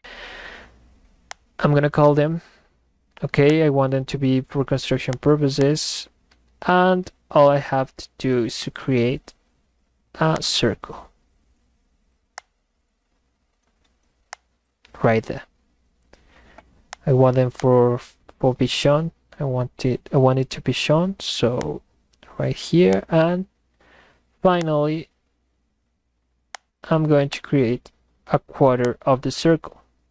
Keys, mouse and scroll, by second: 1.3 click, 3.5 click, 5.1 click, 5.6 click, 12.4 click, 14.3 click, 16.9 click, 17.6 click, 21.6 click, 22.9 click, 24.6 click, 26.5 click, 27.3 click, 28.8 click.